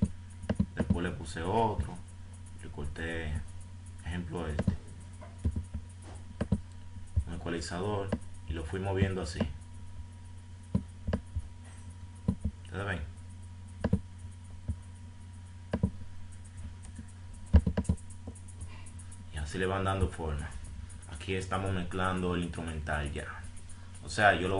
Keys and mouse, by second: 6.7-7.2 drag, 12.5-12.8 drag, 13.1 click, 16.1 right click, 18.6 right click, 18.9 right click, 19.1 right click, 19.5 right click, 20.2 F5.